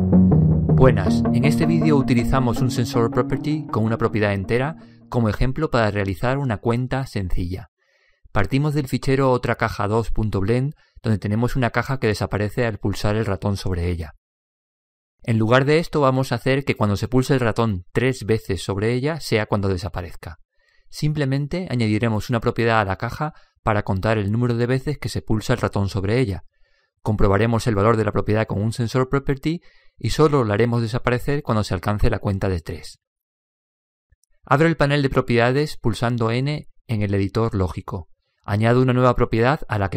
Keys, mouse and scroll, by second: 36.8 n, 39.1-39.9 drag.